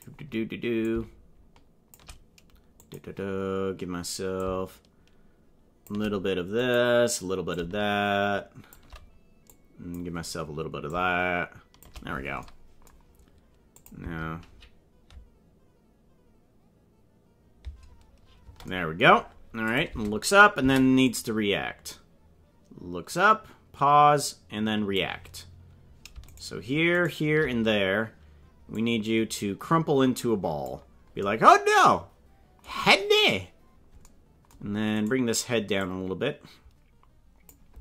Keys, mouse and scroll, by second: 0.8-1.9 shift+drag, 2.7 click, 4.3-5.9 shift+drag, 6.5 click, 7.5-8.7 shift+drag, 9.5 click, 10.9 shift+click, 13.7 click, 13.9 space, 18.4 space, 19.6 click, 19.8 space, 20.6 space, 21.0-24.9 drag, 26.3 shift+right click, 27.0 shift+right click, 28.7-30.6 drag, 35.0 right click, 35.7-37.4 drag.